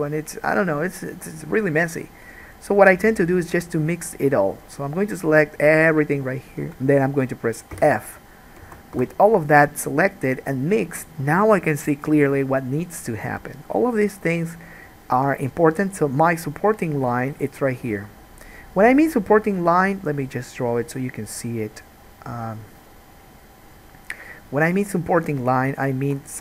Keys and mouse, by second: 3.1 shift+click, 3.6 shift+click, 4.7-6.1 shift+drag, 7.9 f, 8.7-24.9 alt+drag, 8.9 alt+a, 9.1 1, 22.5 Tab, 24.9-26.4 middle drag, 26.2 Escape.